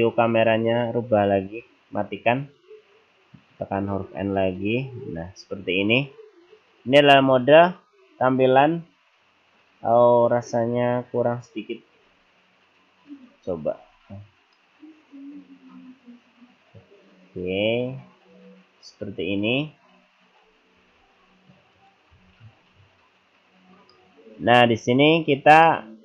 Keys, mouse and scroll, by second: 0.5 n, 2.5 click, 3.8 n, 4.6-5.9 scroll up 6, 5.9-6.4 scroll down 2, 6.4-8.3 scroll up 2, 12.0 n, 13.2 click, 13.8 n, 14.6 middle click, 20.9 n, 21.7 click, 22.2 n, 24.0 middle click, 24.9-25.7 scroll up 5, 25.7 middle click.